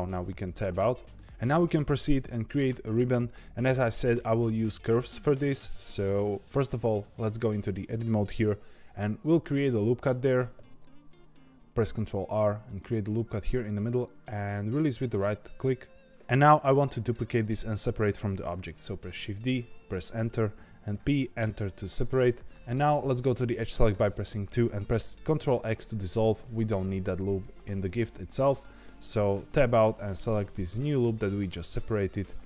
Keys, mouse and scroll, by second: 0.5 shift+middle click, 6.5-7.0 scroll up 2, 7.0 Tab, 10.5 ctrl+r, 19.0 shift+d, 20.9 p, 22.5-23.9 middle drag, 23.9 2, 25.3 ctrl+x, 29.3 Tab, 30.3 click.